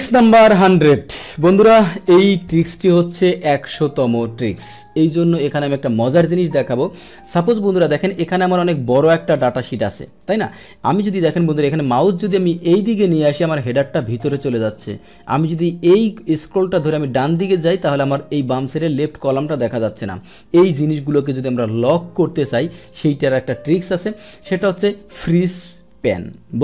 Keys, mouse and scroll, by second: 7.7 click, 10.7 click, 12.8-14.7 drag, 16.1-18.4 drag, 19.0 click, 21.2 Escape, 22.7 click.